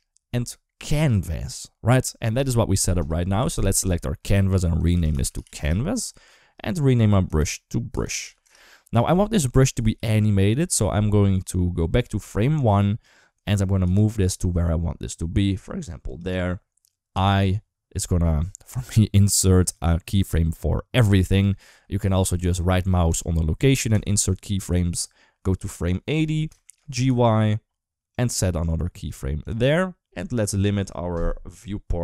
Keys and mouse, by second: 2.8 click, 4.0 F2, 5.3 s, 6.7 F2, 9.5 g, 13.6 g, 16.9 i, 21.9 ctrl+z, 23.0 right click, 25.6 click, 26.4 shift+middle click, 26.7 g, 28.9 right click, 30.5-32.0 drag.